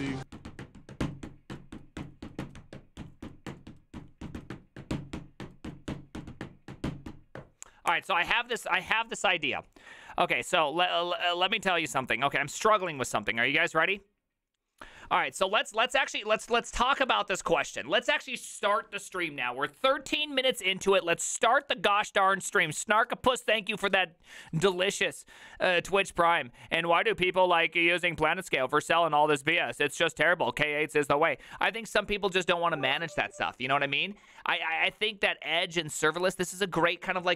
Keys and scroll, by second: 17.0 alt+r, 17.0 Right, 17.2 Right, 17.5 Escape.